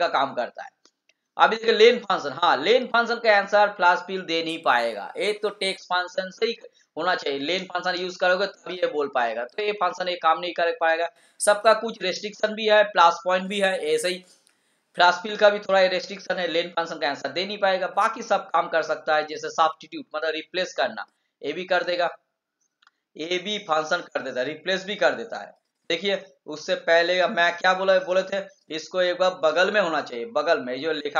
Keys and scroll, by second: 29.6 ctrl+c.